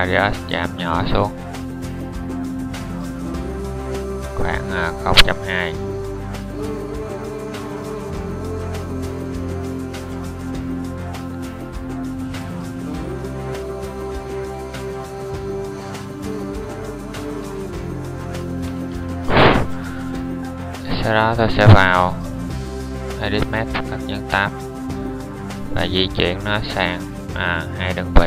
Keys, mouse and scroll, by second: 23.5 Tab.